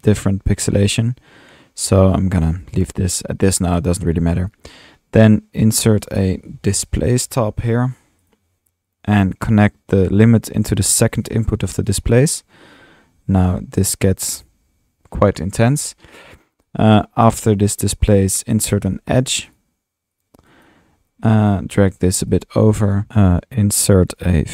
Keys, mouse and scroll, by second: 3.4-4.8 drag, 6.0 click, 6.4-7.5 typing, 8.3 click, 8.9 click, 11.9 click, 12.6 middle click, 16.3 click, 17.5 click, 18.1 click, 18.3-19.0 typing, 19.6-20.2 drag, 20.2 drag, 20.7 click, 22.0-23.1 drag, 22.0-24.5 typing, 24.2 Tab, 24.2 click.